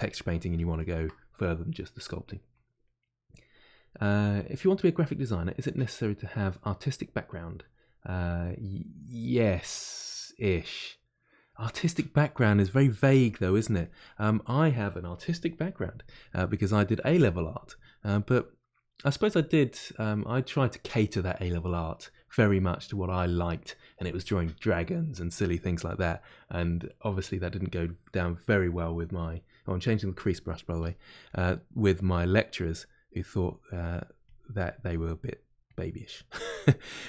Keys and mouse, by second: 0.5-12.4 shift+drag, 12.4 middle click, 13.2 shift+click, 14.2-28.4 middle drag, 28.4 click, 29.0-30.7 middle drag, 30.7 f, 31.5 middle click, 32.4-35.2 drag, 35.2 middle click, 35.6-36.9 drag, 36.9-37.0 middle drag.